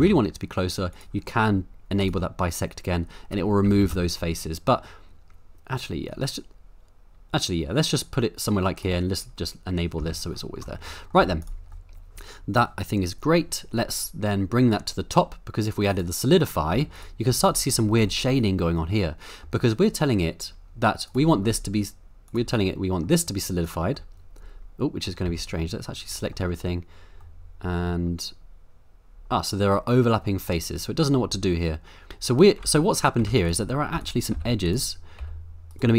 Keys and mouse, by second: 0.0 y, 0.9 click, 2.0 click, 3.6 g, 3.8 y, 8.8 click, 10.0 Tab, 10.8-11.2 middle drag, 11.2 z, 11.8 middle click, 15.9 click, 16.7 z, 17.3 z, 18.0-19.5 middle drag, 21.1 click, 22.3 click, 22.7 middle click, 23.6 click, 23.9-25.0 middle drag, 25.2 Tab, 25.6 middle click, 27.3 middle click, 30.2-32.1 middle drag, 32.1 m, 32.6 ctrl+z, 33.2-35.9 typing, 34.0 click, 35.7 right click.